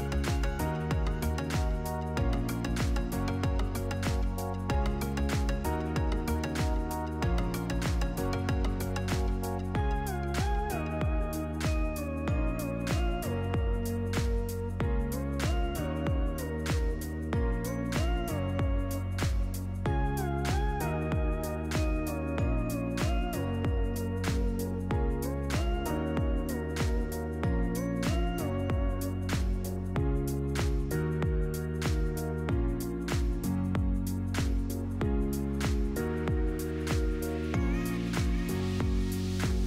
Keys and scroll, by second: 3.5 Up, 23.9 Tab.